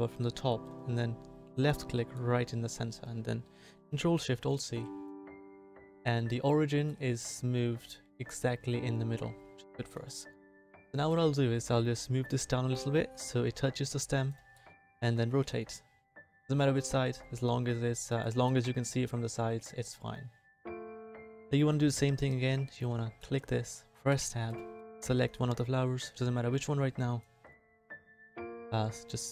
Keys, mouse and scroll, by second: 15.2 r, 24.1 Tab, 25.0 c, 28.4 c.